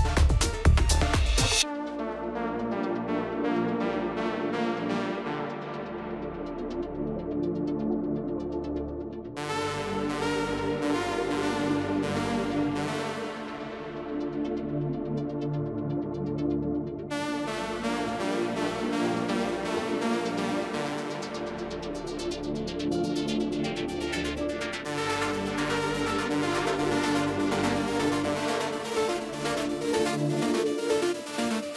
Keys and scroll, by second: 7.4 Right, 7.8 shift+x, 21.6 ctrl+space, 27.5 ctrl+space.